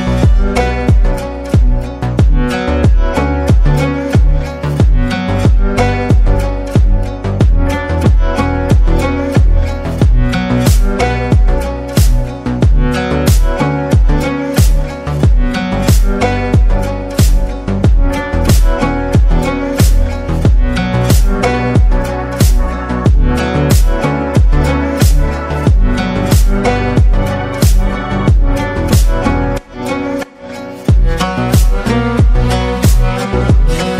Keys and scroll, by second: 0.0-2.1 typing, 4.3-5.0 typing, 16.4 ctrl++, 17.4 ctrl+v.